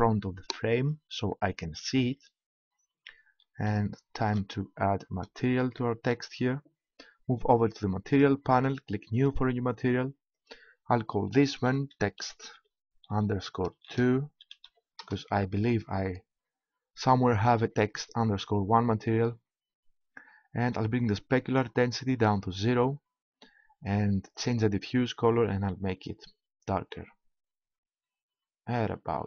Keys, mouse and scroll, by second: 0.5 click, 8.1-12.1 drag, 21.3-23.1 drag, 24.3-26.2 drag.